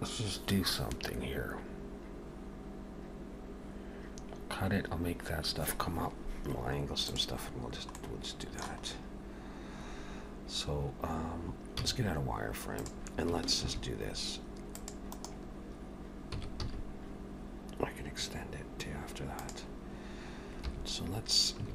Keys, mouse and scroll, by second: 8.0 middle click, 8.9-10.1 scroll up 2, 11.8 z, 13.6 ctrl+r, 16.4 s, 20.7 3, 21.6 a.